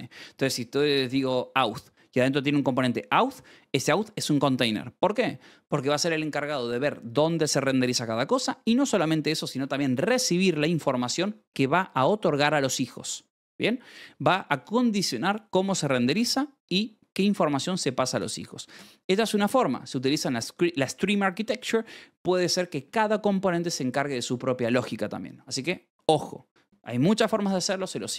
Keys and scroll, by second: 27.5 Escape.